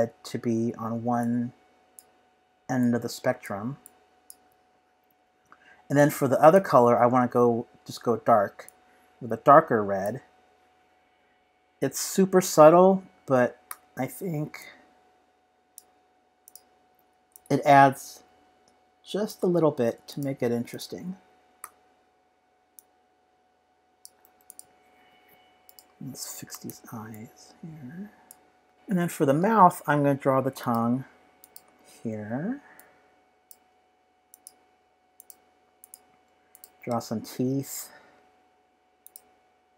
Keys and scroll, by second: 21.6 g.